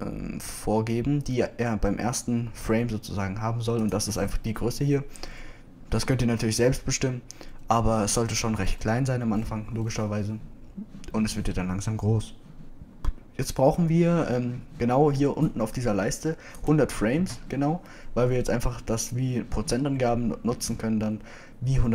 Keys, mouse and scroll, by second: 18.2 Right.